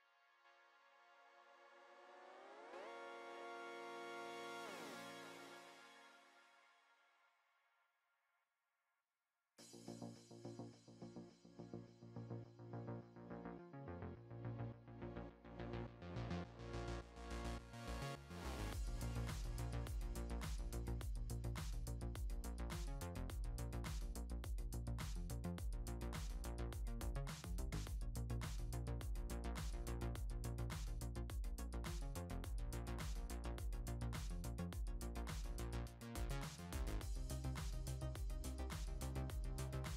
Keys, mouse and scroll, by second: 0.7-1.9 drag, 1.9 shift+middle click, 2.3-2.6 scroll down 2, 2.6-4.7 shift+middle drag, 4.7-8.6 drag, 8.6-10.1 shift+middle drag, 10.1-10.5 scroll up 2, 10.5 middle click, 11.4 3, 11.7 click, 12.7 click, 13.5-14.6 shift+middle drag, 14.6-15.1 scroll down 1, 15.1-16.1 scroll down 1, 16.1-19.1 drag, 19.3 scroll down 1, 19.7-21.2 shift+middle drag, 21.2-21.7 scroll up 2, 21.7-24.1 middle drag, 24.1 click, 26.1 click, 27.4-28.4 shift+middle drag, 28.4 Tab, 28.8 click, 29.1-29.7 scroll down 5, 29.7-30.1 middle drag, 30.1 scroll down 1, 30.6 scroll down 1, 30.6 shift+middle click, 31.4-31.8 scroll up 3, 32.1 click, 32.1 scroll up 3, 32.4 middle click, 33.0 Tab, 33.3-33.9 scroll up 2, 34.3 scroll up 1, 35.3 click, 37.2 s.